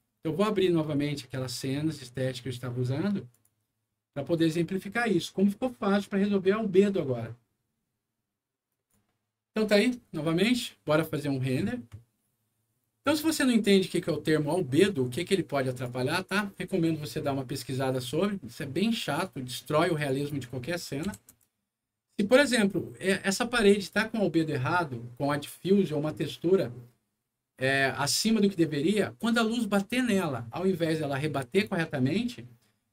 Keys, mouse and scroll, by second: 0.7 click, 3.2 click, 4.3 click, 8.6 click, 8.9 c, 10.9 click, 15.2 click, 19.0 click, 19.9 click, 20.1 click, 21.0 4, 21.3 Return.